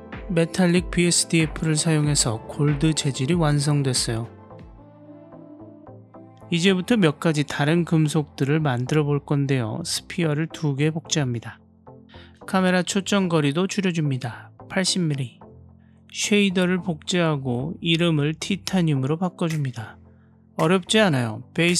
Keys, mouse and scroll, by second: 8.0 shift+d, 10.8 shift+d.